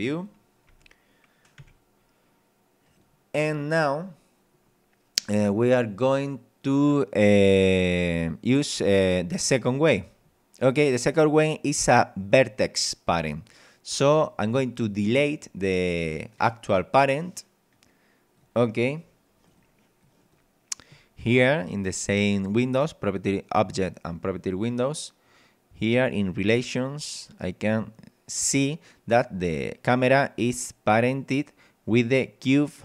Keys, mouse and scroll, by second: 0.1 click, 0.7 e, 1.6 r, 2.9 click, 3.5-4.2 scroll up 2, 7.8 click, 10.2 scroll down 2, 10.7 scroll up 2, 14.1 right click, 15.7 click, 17.7 click, 19.5 click, 20.0 click, 26.4 click, 30.0 right click.